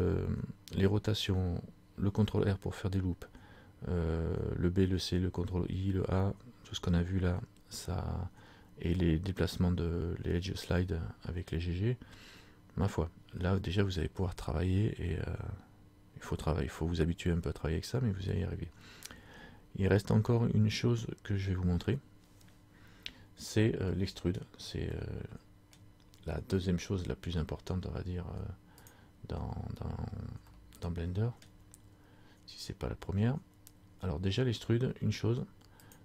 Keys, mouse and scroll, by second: 23.7 middle click, 24.6-25.0 scroll down 1, 25.0 middle click, 25.0 scroll up 1, 29.0 click, 30.2 scroll down 2, 30.7 middle click, 31.6 scroll down 1, 32.2 scroll up 2, 35.9 click.